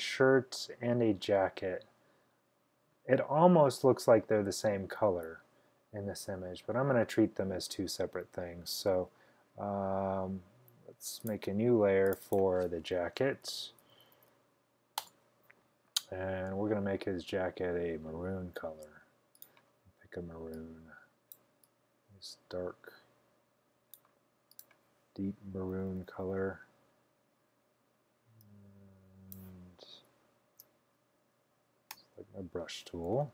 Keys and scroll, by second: 13.2-14.7 typing, 15.0 Return, 25.8-27.4 typing, 30.5 super+d, 32.0 b, 33.1-33.3 typing.